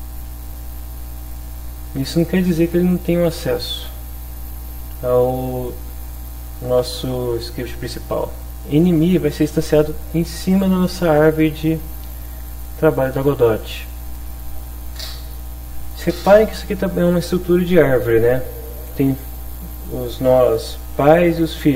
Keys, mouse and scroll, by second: 0.3 click, 1.4-2.7 drag, 12.3 click.